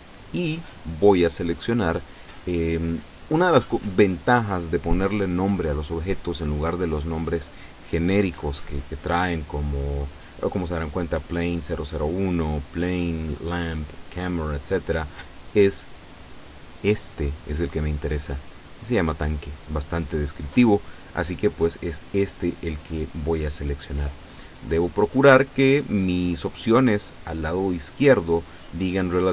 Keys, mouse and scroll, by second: 24.4 scroll down 1, 24.9-25.6 scroll down 2.